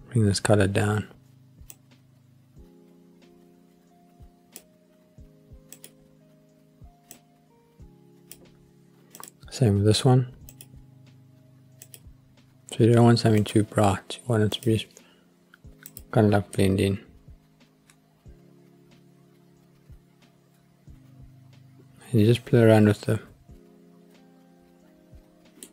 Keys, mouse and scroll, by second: 5.7 click, 9.2 click, 10.5 click, 13.4 click, 15.9 click, 16.6-25.7 middle drag.